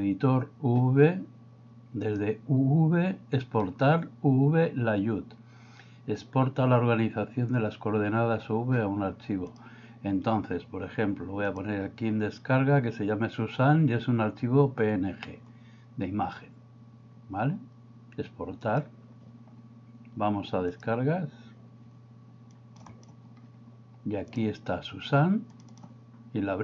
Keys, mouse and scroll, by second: 2.0-9.7 drag.